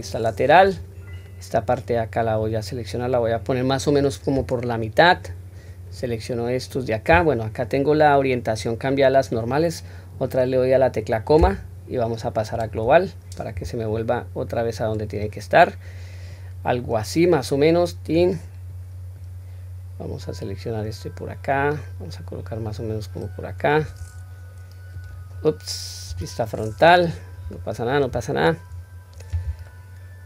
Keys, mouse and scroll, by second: 1.1-1.5 drag, 2.3-4.0 drag, 5.5-6.0 drag, 13.9-15.2 drag, 16.3-16.8 drag, 17.3 click, 18.7-19.2 drag, 20.0 click, 21.5 click, 25.0 click, 26.0 KP_1, 27.5-28.0 shift+middle drag, 28.7-29.5 scroll up 2, 29.7-30.2 shift+middle drag.